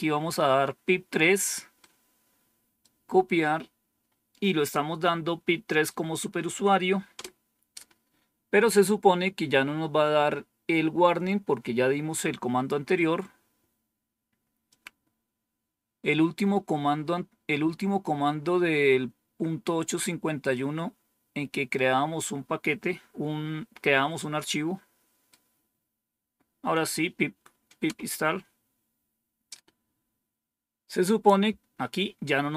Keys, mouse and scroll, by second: 1.7-2.7 right drag, 4.3-5.8 right drag, 7.0 Return, 14.6-16.2 drag, 20.4-21.7 right drag, 24.0-25.2 right drag, 27.7 Return.